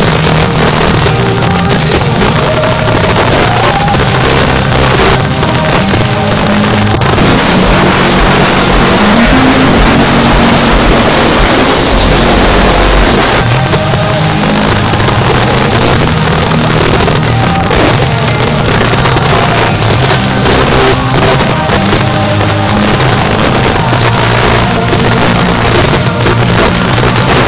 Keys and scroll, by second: 13.2 Page_Down.